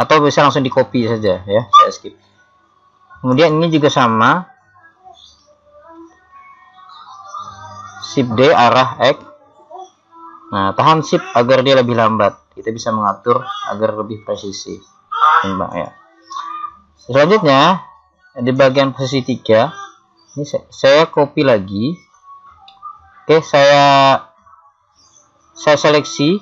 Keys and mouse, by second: 3.4 right click, 5.5 KP_1, 8.4 shift+d, 18.7 KP_3, 20.4 z, 24.7 middle click, 25.5 middle click.